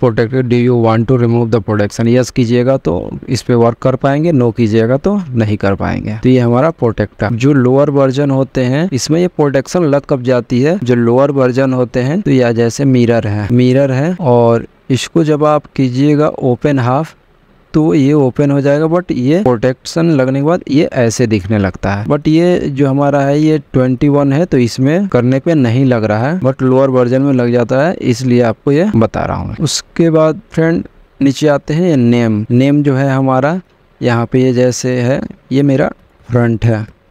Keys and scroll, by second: 11.3 h, 26.4 ctrl+z, 36.3-37.1 typing.